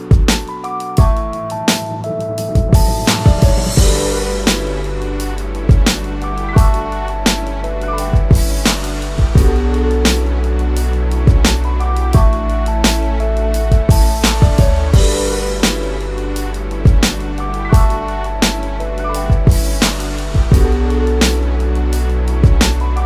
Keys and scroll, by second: 2.8 space, 7.0 space, 9.6 space, 15.8-16.6 space.